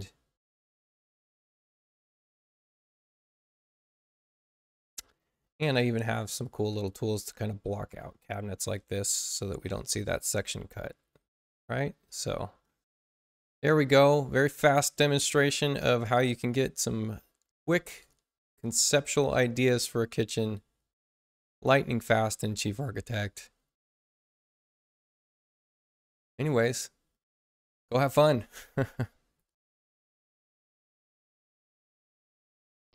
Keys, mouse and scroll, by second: 1.1 Return, 3.0-3.7 typing, 6.4 click, 7.8 click, 9.6 click, 12.0 click, 15.8 Tab, 31.6 shift+F1.